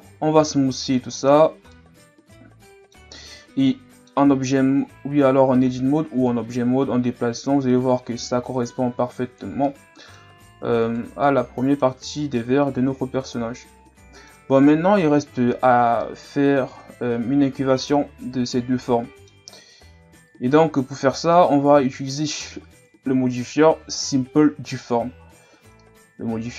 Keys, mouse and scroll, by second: 0.0 w, 1.4-1.7 scroll down 3, 1.7-3.3 middle drag, 3.3 scroll up 1, 3.6 middle click, 4.3 Tab, 5.1 a, 5.5 a, 6.3-9.2 drag, 9.7 middle click, 10.4 Tab, 10.8 right click, 11.2-15.4 middle drag, 16.0-19.0 middle drag, 21.3-22.8 middle drag, 22.8 KP_1, 25.8-26.5 middle drag.